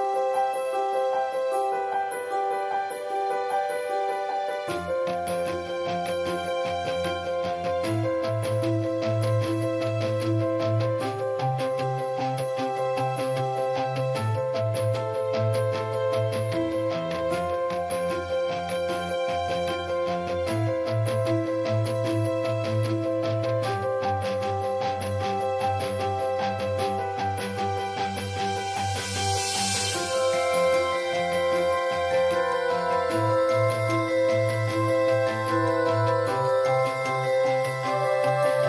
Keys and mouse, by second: 0.1 ctrl+s, 1.1-2.0 drag, 2.1-2.5 drag, 2.4 ctrl+s, 2.5-2.9 middle drag, 2.9-3.6 drag, 3.6 middle click, 4.4-5.1 drag, 4.8 ctrl+s, 4.9-6.0 middle drag, 5.4 ctrl+s, 6.4 a, 6.5 a, 6.7 click, 7.6-8.4 middle drag, 9.0 ctrl+s, 9.2 middle drag, 9.3 a, 9.7 ctrl+s, 10.5 click, 11.2 ctrl+s, 12.1 click, 12.3-12.6 middle drag, 14.5 click, 14.9 ctrl+s, 15.5 alt+s, 16.0-16.4 drag, 16.5 ctrl+s, 18.7 middle click, 18.8-20.7 drag, 19.2 ctrl+s, 19.6 ctrl+s, 19.9 ctrl+s, 21.1 ctrl+s, 21.3-21.6 drag, 21.9 ctrl+s, 23.1-24.0 drag, 24.3-24.9 middle drag, 24.7-25.5 typing, 25.9-26.6 middle drag, 26.6 l, 26.8-27.5 middle drag, 27.5 l, 27.9 ctrl+s, 28.5-29.3 middle drag, 29.0 [, 29.3-29.9 drag, 30.1 ctrl+s, 30.8 middle click, 31.0-33.6 drag, 33.7 ctrl+s, 34.3-34.6 drag, 35.7-36.3 middle drag, 36.6 click, 37.3-37.9 drag, 37.9 middle click, 38.5-38.6 drag.